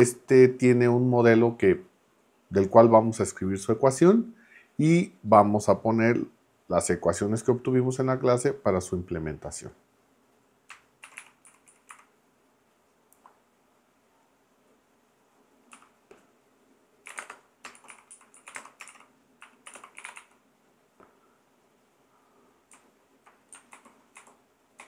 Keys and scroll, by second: 10.8-12.4 typing, 15.7 a, 17.1-20.7 typing, 23.7 super+=, 24.3 super+=.